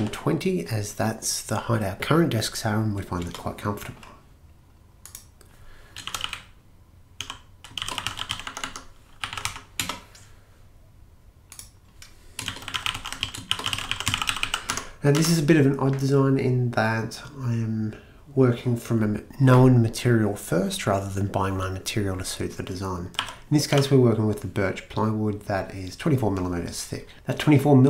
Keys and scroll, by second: 0.0-0.5 typing, 3.2 Return, 5.8-10.3 typing, 12.3-15.7 typing, 23.2-23.8 typing.